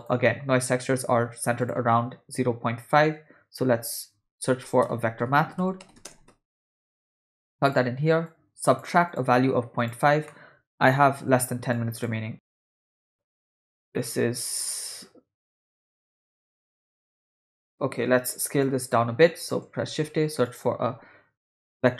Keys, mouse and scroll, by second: 0.2 middle click, 1.0 shift+a, 8.3-8.9 drag, 9.1-10.0 drag, 10.3 middle click, 11.7-13.2 shift+drag, 14.0 middle click, 15.0-16.3 drag, 16.7 middle click, 17.5 middle click, 18.6 click, 19.3 click, 19.8 shift+a.